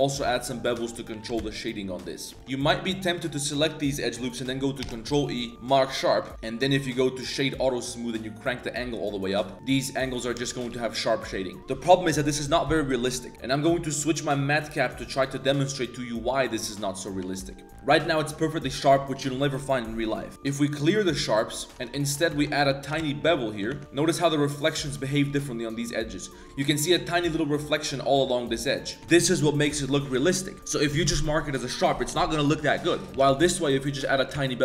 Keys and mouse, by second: 0.0 click, 0.4 alt+shift+right click, 0.8 middle click, 1.2 ctrl+b, 2.4 ctrl+e, 2.6 click, 3.1 alt+shift+click, 3.4 alt+shift+click, 4.8 ctrl+e, 6.2 Tab, 6.3-7.6 drag, 8.7 click, 9.5-9.9 middle drag, 10.3 middle drag, 10.5 a, 10.7 a, 10.8 middle drag, 11.5 click, 13.3-16.6 drag, 16.9 middle click, 17.3 shift+middle drag, 17.5 Tab, 17.7 Tab, 20.3 Tab, 20.3 ctrl+e, 21.7 alt+2, 21.7 alt+right click, 22.0 alt+shift+right click, 22.8 ctrl+b, 23.7 Tab, 23.8 ctrl+z, 23.9-24.9 middle drag, 25.7 middle click, 26.4 middle drag, 26.7-27.6 middle drag, 28.0 middle click, 28.8 middle drag, 29.0 Tab, 33.1 Tab, 33.1 2, 33.1 z, 33.2 ctrl+b, 34.4 Tab, 34.5-34.6 middle drag.